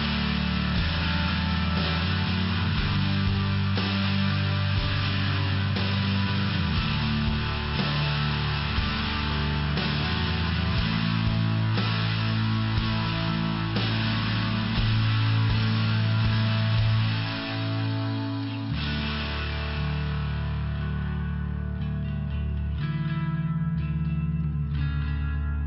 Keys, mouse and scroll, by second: 0.0 click, 0.1 click, 1.2 click, 1.3 click, 1.7 click, 1.9 click, 2.3 click, 2.5 click, 3.0 click, 3.2 click, 3.8 click, 3.9 click, 4.4 click, 5.7 click, 5.9 click, 6.5 click, 6.6 click, 8.0 click, 8.1 click, 8.4 click, 8.5 double click, 8.8 double click, 8.9 double click, 9.2 double click, 9.3 double click, 9.7 double click, 9.9 double click, 10.2 double click, 10.4 double click, 10.9 double click, 11.0 double click, 11.6 click, 11.7 click, 12.2 click, 12.3 click, 12.9 click, 13.0 click, 13.8 click, 15.5 click, 15.7 click, 16.1 click, 16.1 click, 16.8 click, 17.0 click, 17.7 click, 17.8 click, 18.4 click, 18.5 click, 18.8 click, 18.9 double click, 19.4 double click, 19.5 double click, 20.0 click, 20.8 click, 25.0 click, 25.6 click.